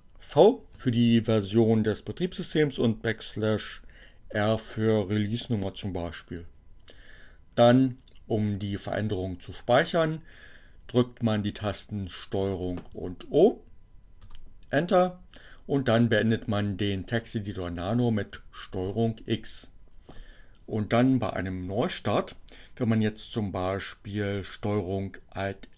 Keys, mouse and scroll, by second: 0.6 v, 1.2 space, 3.6 r, 11.1 ctrl+o, 13.6 Return, 18.7 ctrl+x.